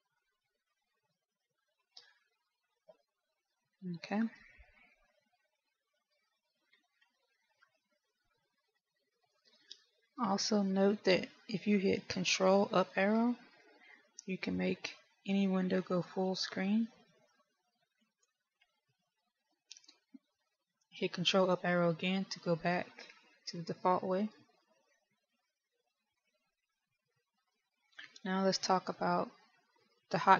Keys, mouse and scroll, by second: 2.1-4.1 scroll up 1, 4.1-5.3 scroll up 1, 5.3 shift+middle click, 6.2-6.7 scroll up 1, 7.1-7.5 scroll down 2, 7.3-8.7 scroll up 4, 8.7-9.4 scroll down 2, 9.4 shift+middle click, 13.2 ctrl+Up, 16.2 ctrl+Up, 20.4 ctrl+Up, 24.2 ctrl+Up, 29.2 shift+middle click.